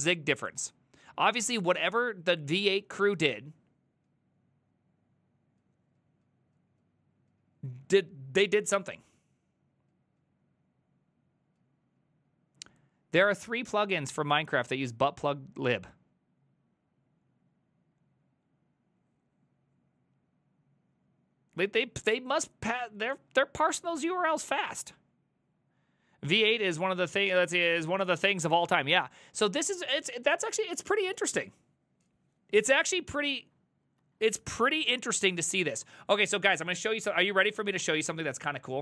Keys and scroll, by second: 34.1 alt+{, 34.9 Up, 35.2 Up, 35.7 a, 35.8 Up, 37.4 ctrl+c, 37.6 ctrl+c, 37.7 ctrl+a, 37.8 3, 38.2 ctrl+a, 38.2 ctrl+c, 38.3 ctrl+c.